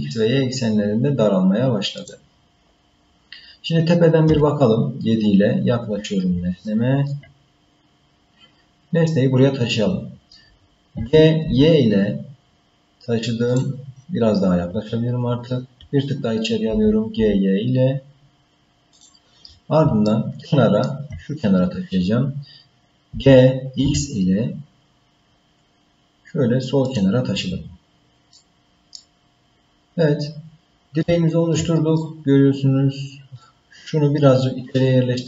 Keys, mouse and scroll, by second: 4.3 KP_7, 5.5-6.3 scroll up 1, 6.3 scroll up 1, 6.5 shift+middle click, 7.4-8.0 scroll up 1, 8.0-8.6 scroll up 1, 10.9 g, 14.0-15.1 scroll up 6, 15.1-16.7 scroll up 1, 16.7 g, 20.1 shift+middle click, 23.1 g, 27.8-28.4 scroll down 4, 28.4 middle click, 29.2-29.6 scroll down 2, 29.8 scroll down 3, 30.6-31.2 scroll up 2, 31.0 shift+middle click, 32.0-33.4 middle drag.